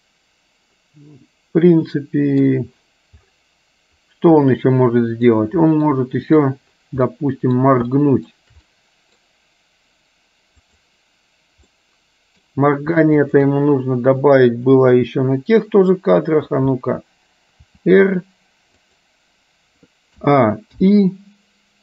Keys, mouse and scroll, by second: 0.8-2.5 middle drag, 4.7 middle click, 6.0 middle click, 7.2 middle click, 8.0 shift+middle click, 8.9 middle click, 10.8 click, 11.9 middle click, 13.3 shift+click, 14.8-16.4 middle drag, 17.8 r, 20.3 a, 20.9 i.